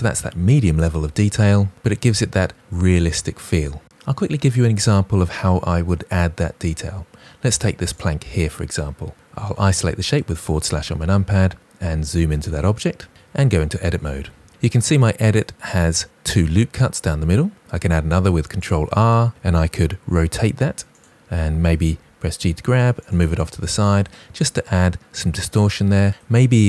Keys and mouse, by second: 13.1 Tab, 15.3 middle click, 18.0 ctrl+r, 18.5 click, 20.0 r, 21.8 g, 22.9 click, 23.5 middle click.